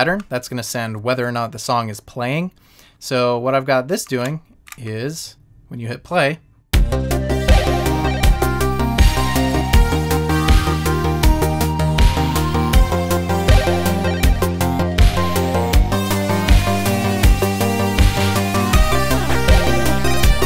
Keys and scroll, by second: 4.2 shift+Down, 20.2 shift+Up.